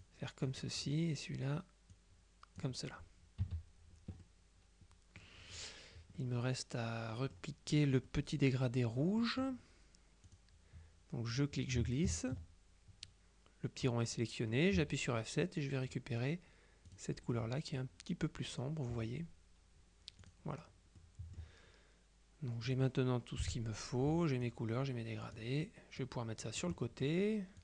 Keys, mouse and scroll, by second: 0.1 click, 2.0 click, 3.5 KP_Subtract, 4.3 click, 4.4-5.8 middle drag, 6.2-7.9 drag, 8.1-9.8 drag, 10.3 click, 11.4-12.9 drag, 14.8 F7, 15.5 click, 15.8 middle click, 17.0 click, 20.3 click, 21.0 middle click, 22.7 click, 23.5 Delete, 24.5-25.9 drag, 26.1-27.6 drag.